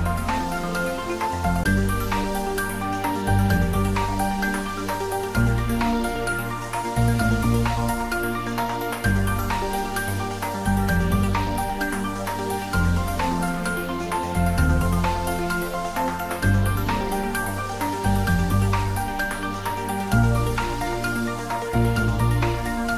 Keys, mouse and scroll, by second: 2.4-3.9 scroll up 1, 4.3 ctrl+s, 6.1 click, 13.3 Tab, 16.2-18.4 drag, 18.4 scroll up 1, 21.1 `, 21.5 3.